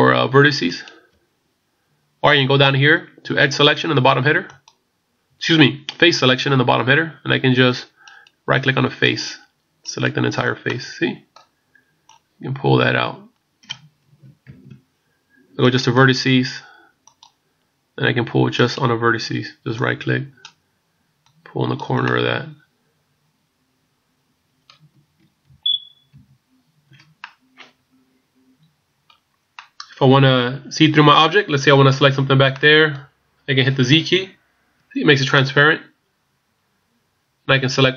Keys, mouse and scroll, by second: 4.5 click, 8.2 right click, 9.0 right click, 10.7 middle click, 12.2 click, 14.5 ctrl+z, 15.6 right click, 17.0 click, 18.6 right click, 19.8 click, 21.4 click, 25.6 ctrl+z, 26.2 ctrl+z, 27.2 middle click, 29.6 middle click, 32.5 middle click, 34.2 z, 35.3 middle click.